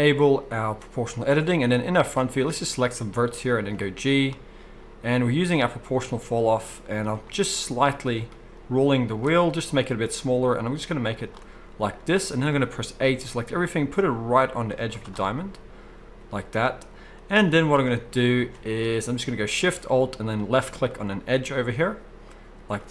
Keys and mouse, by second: 0.5 middle click, 1.2-11.4 drag, 3.8 g, 9.5 g, 11.4-20.3 middle drag, 12.5 a, 13.2 g, 14.8 z, 18.3 alt+a, 20.3 alt+shift+click, 20.5-21.5 alt+shift+middle drag, 21.5 click.